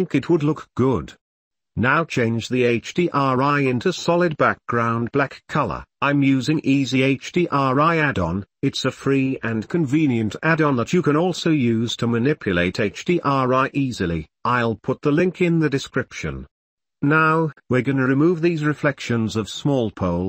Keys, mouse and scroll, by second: 0.6 Tab, 1.4 n, 10.4 n, 10.9-12.3 middle drag, 12.8 ctrl+s, 18.9-20.1 middle drag.